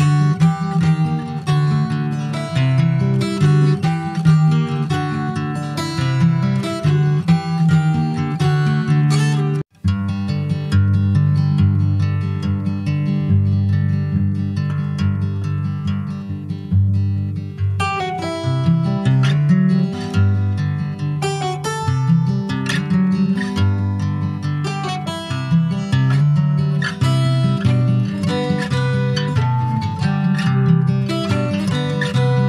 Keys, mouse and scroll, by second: 3.1 middle click, 3.8 e, 6.1 Tab, 6.4 click, 6.7 middle click, 7.0 scroll up 1, 7.0 Tab, 7.9 2, 8.2 click, 9.0 alt+shift+click, 9.6-10.6 middle drag, 10.6 alt+shift+click, 11.5 ctrl+b, 13.1 Tab, 13.1 click, 13.4 scroll down 4, 13.6 middle click, 14.3 ctrl+5, 14.3 middle click, 14.6 scroll up 1, 14.8 scroll down 3, 15.0 middle click, 15.4 scroll down 1, 15.6 shift+middle click, 16.2-16.5 scroll up 2, 16.5 ctrl+s, 16.6 click, 16.9 Tab, 17.2-18.0 scroll up 4, 17.6 middle click, 18.1 shift+middle click, 18.4 shift+scroll up 1, 18.5 click, 19.1 Tab, 19.3 click, 20.1 Tab, 20.3 click, 21.4 3, 21.7 click, 22.1-23.4 middle drag, 23.4 e, 25.4 middle click, 25.9 ctrl+b, 30.9-32.4 drag.